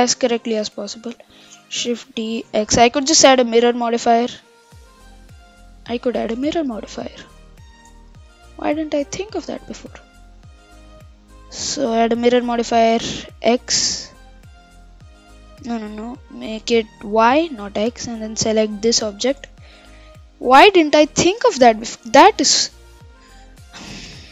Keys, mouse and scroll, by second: 1.6 shift+d, 8.1 ctrl+z, 12.2 drag, 13.5 click, 15.3 click, 17.5 click, 18.2 click, 20.0-20.6 middle drag, 20.6-21.0 scroll down 1, 21.0-24.0 middle drag.